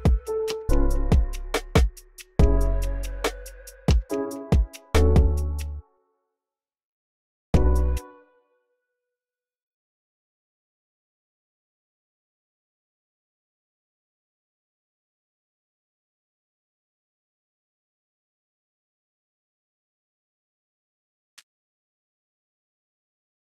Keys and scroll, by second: 2.4 c, 2.8 x, 3.4 v, 3.7 v, 6.2-7.8 typing, 15.0 v, 15.4 v, 16.5 v, 18.1 t, 19.0 alt+super+l, 22.4 ctrl+alt+d, 22.9 alt+Left, 23.3 alt+Left.